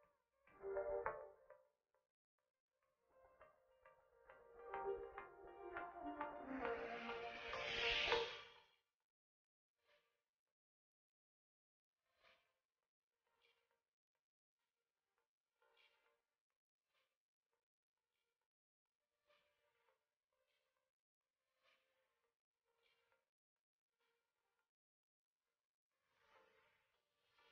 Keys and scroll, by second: 2.5 shift+space, 12.5 ctrl+z, 14.9 shift+space, 22.5 ctrl+z.